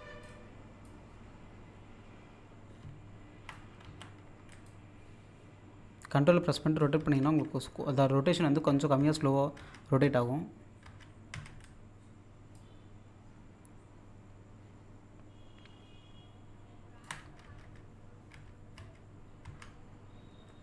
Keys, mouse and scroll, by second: 0.2-3.8 drag, 3.8 z, 4.7-7.0 ctrl+drag, 12.5-17.2 ctrl+drag.